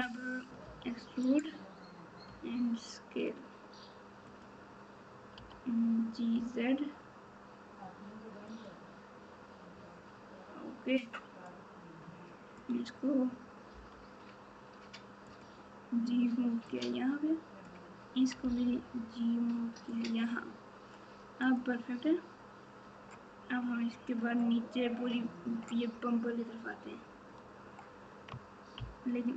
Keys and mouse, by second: 0.6 e, 2.2 s, 5.3 g, 11.4 click, 11.7 click, 13.7 g, 16.6 click, 16.9 click, 18.4 g, 21.4 click, 28.7 ctrl+KP_6, 29.2 ctrl+KP_6.